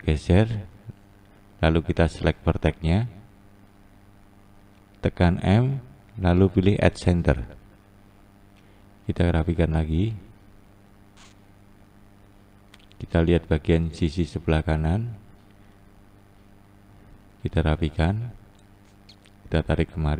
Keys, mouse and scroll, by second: 0.0 click, 2.0-4.7 scroll up 2, 4.7 shift+click, 7.2 m, 8.0 scroll down 2, 8.9 click, 12.5-13.8 scroll down 1, 13.8-14.7 scroll down 1, 14.7 scroll down 2, 14.9-16.6 scroll up 2, 16.6 click, 17.4 click, 19.4 click.